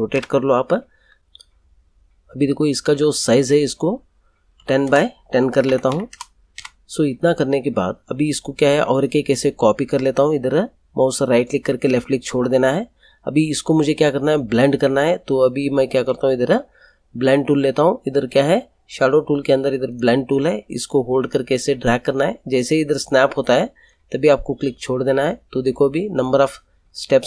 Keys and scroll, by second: 0.1 Return, 4.5-6.6 typing.